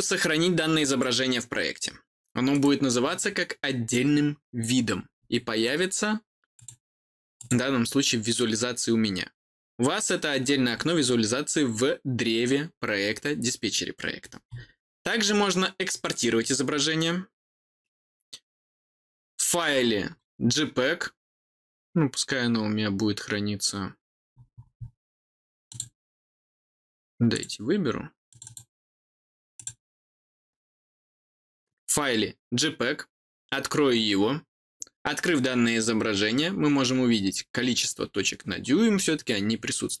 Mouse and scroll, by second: 0.8 click, 2.5 click, 4.4-4.7 scroll down 1, 4.7-6.5 scroll up 2, 6.5 click, 7.3 click, 10.4-10.7 scroll down 2, 14.1-14.5 scroll up 1, 15.9 click, 20.1-20.8 scroll down 3, 24.3-24.9 scroll down 2, 25.6 click, 27.3 click, 28.2 click, 29.5 click, 37.4-38.5 middle drag, 38.5-40.0 scroll down 2.